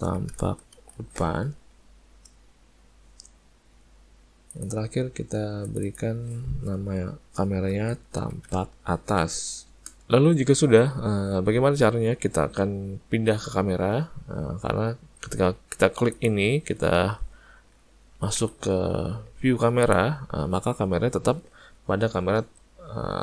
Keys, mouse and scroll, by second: 4.5 click, 5.7 click, 5.9 click, 16.2 click.